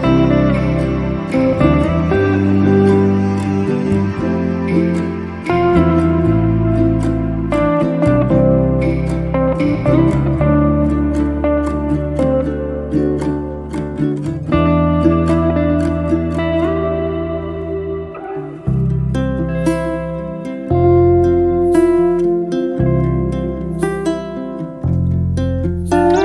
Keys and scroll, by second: 0.7 8, 1.2 Return, 2.4 space, 4.8 m, 9.1 space, 10.6 m, 14.0 KP_Divide, 14.3 4, 14.7 Return, 16.2 space, 18.8 f, 21.1 0, 21.7 KP_Decimal, 22.4 Return, 23.8 Escape.